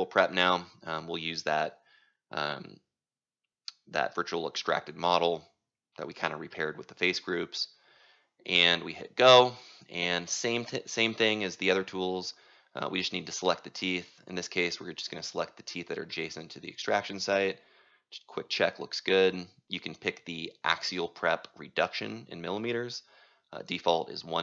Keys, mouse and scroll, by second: 9.3-10.8 typing, 11.4-17.8 drag, 17.8-19.4 right drag, 19.4-24.4 drag.